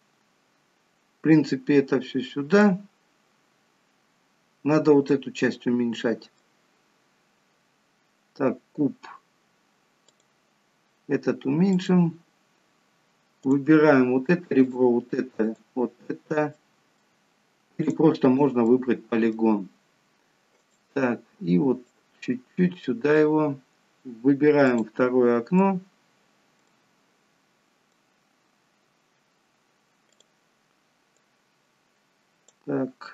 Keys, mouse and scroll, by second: 3.6-4.7 scroll up 1, 5.4 middle click, 5.4-6.8 scroll up 1, 10.1 click, 11.8 click, 14.6 shift+click, 15.5 shift+click, 16.7 middle click, 17.9 shift+click, 18.8 middle click, 20.7 click, 22.0 click, 25.7 middle click, 26.7 middle click, 30.2 click, 31.2 click.